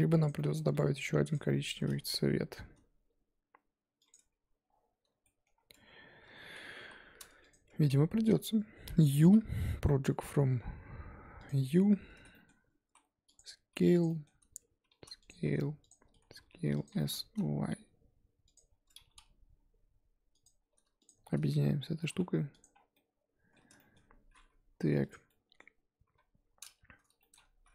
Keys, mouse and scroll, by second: 0.2 click, 0.7 g, 1.3 Tab, 1.7 Tab, 1.9 g, 4.1 Tab, 5.2 middle click, 5.5 scroll up 2, 5.7 Tab, 6.8 KP_1, 7.3 Tab, 7.4 click, 7.7 Tab, 7.9 a, 11.5 u, 12.1 a, 12.8 s, 13.7 g, 14.1 middle click, 14.9 s, 15.3 g, 16.0 s, 16.9 s, 18.7 Tab, 21.0 shift+click, 22.0 ctrl+j, 22.6 click, 22.7 scroll down 5, 22.9-24.0 middle drag, 24.0-25.1 scroll up 1, 25.1 click, 25.3 middle click, 26.0 KP_7, 26.8 Tab, 27.2 shift+middle click, 27.3 scroll up 3, 27.5 z.